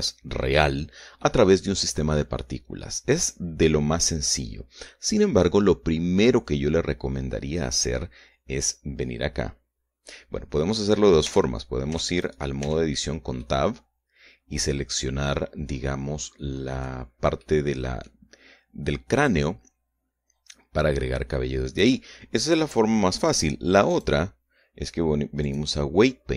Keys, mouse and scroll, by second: 1.6-3.8 middle drag, 5.6 scroll down 2, 6.3 scroll up 2, 11.7 Tab, 12.6 Tab, 12.6 right click, 13.0 Tab, 13.8-17.4 middle drag, 17.8 middle click, 24.3 click, 25.9 click.